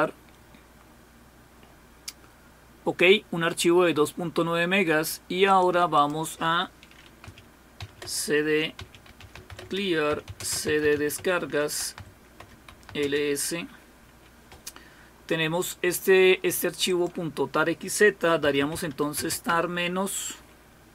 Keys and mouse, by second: 5.5-6.7 drag, 8.5-13.4 typing, 16.9 click, 19.5 typing.